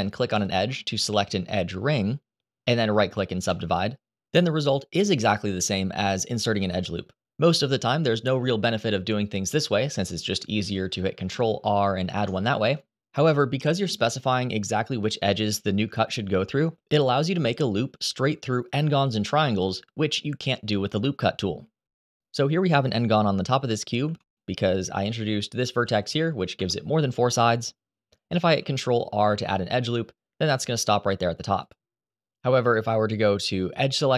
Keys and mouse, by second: 2.5 right click, 10.8 ctrl+r, 11.9 Escape, 21.8 middle click, 24.0 1, 24.7 click, 25.5 g, 26.3 Escape, 28.3 ctrl+r, 32.1 Escape, 33.0 ctrl+z, 33.4 ctrl+z.